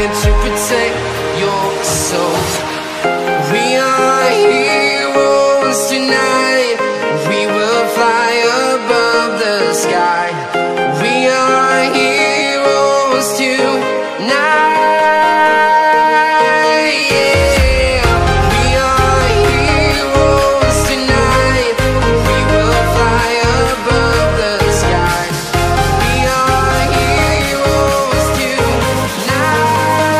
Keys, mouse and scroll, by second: 0.4 Return, 0.9 Left, 1.2 Up, 2.9 click, 6.1 Return, 6.9 click, 7.6-9.1 scroll down 1, 9.1 click, 12.2 Delete, 13.7 click, 19.6 ctrl+click, 21.4 click, 23.9 click, 27.5 click, 28.3-28.8 scroll up 2, 29.4-29.8 scroll up 2.